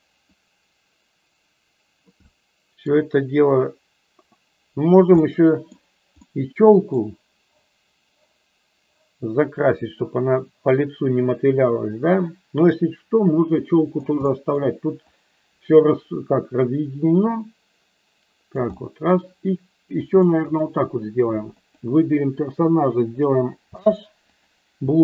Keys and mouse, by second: 0.3-2.0 drag, 2.2 middle click, 2.6 middle click, 3.5-4.9 drag, 5.2 middle click, 6.2 middle click, 10.0-13.9 drag, 14.2 middle click, 15.0-18.5 drag, 18.6 middle click, 19.9 click, 21.4 click, 23.6 h, 24.2 click, 24.8 h.